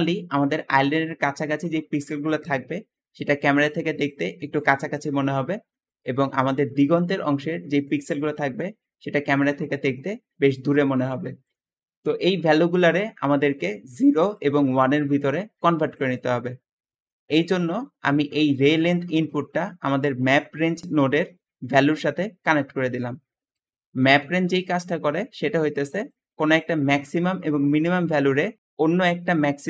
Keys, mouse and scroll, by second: 0.0 Escape, 16.8 Escape, 17.4 Escape, 23.9 g, 23.9 g, 25.8 g, 29.4 `.